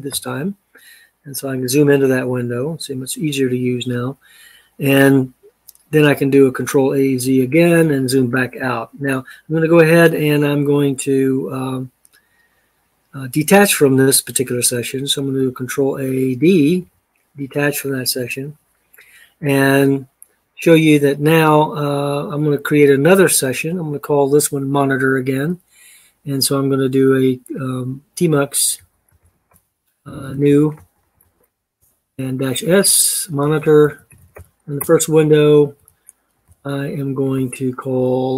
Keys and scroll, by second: 6.9 ctrl+a, 7.4 z, 15.5 ctrl+a, 16.6 d, 28.3-31.6 typing, 32.8-37.1 typing.